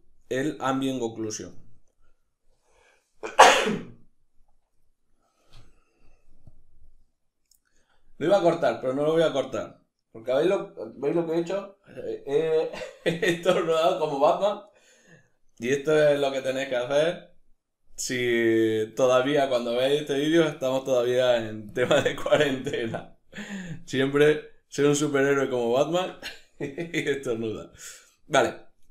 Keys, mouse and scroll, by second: 0.3 click, 1.0-6.1 middle drag, 6.1 click, 6.7-21.4 middle drag, 21.4-23.3 drag, 23.0 scroll down 1, 23.3-28.9 middle drag.